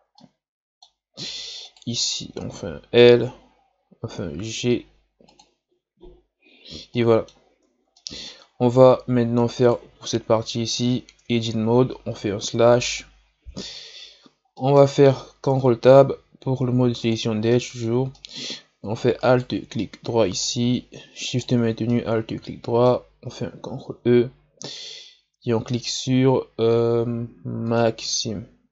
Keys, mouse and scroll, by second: 0.1-1.6 middle drag, 1.6 right click, 2.0 l, 3.8 g, 6.1-6.9 scroll down 4, 6.9 scroll down 1, 7.0 middle click, 7.5 Tab, 7.9-8.5 middle drag, 8.5-9.1 scroll down 4, 9.1 scroll up 1, 9.6 right click, 11.3 Tab, 12.4 KP_Divide, 13.0-14.1 middle drag, 14.1-14.5 scroll down 2, 14.5 middle click, 15.4 ctrl+Tab, 17.5-19.2 middle drag, 19.2 alt+right click, 19.8-21.2 middle drag, 21.2 alt+shift+right click, 21.9-23.7 middle drag, 23.7 ctrl+e.